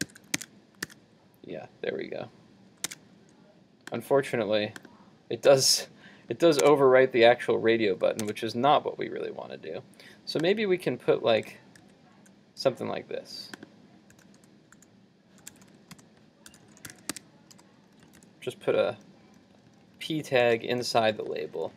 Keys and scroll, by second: 0.1 super+s, 0.5 super+Tab, 0.9 super+r, 3.0 super+Tab, 6.7 super+Tab, 11.5 super+z.